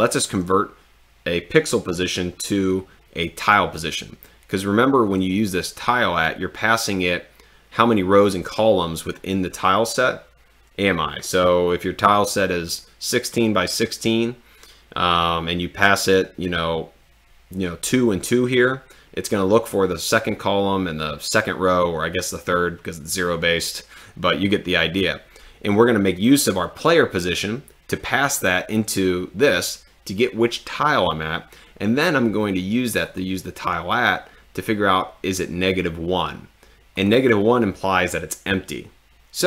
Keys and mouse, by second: 5.8 click, 33.1 click.